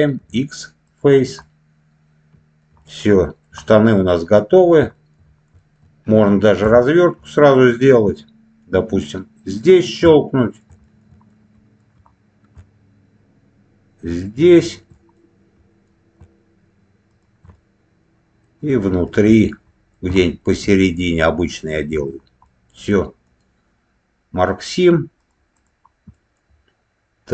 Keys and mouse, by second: 0.1 x, 1.3-2.5 middle drag, 2.7 middle click, 3.5 middle click, 4.2 middle click, 4.9 shift+middle click, 5.5 shift+middle click, 6.5 2, 6.7 click, 7.1 middle click, 9.4 alt+shift+click, 10.3 middle click, 10.7 shift+middle click, 11.2 alt+middle click, 14.5 alt+shift+click, 15.1 middle click, 17.4 middle click, 19.0 alt+middle click, 20.1 shift+middle click, 21.6 alt+shift+click, 22.4 middle click, 23.1-25.2 right drag, 25.4 click, 26.0 middle click.